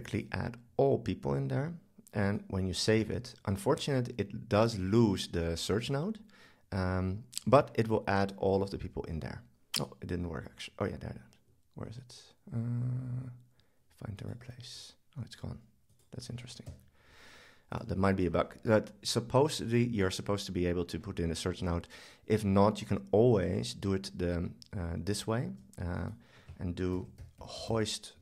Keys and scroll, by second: 23.4 super+z, 26.9 super+k.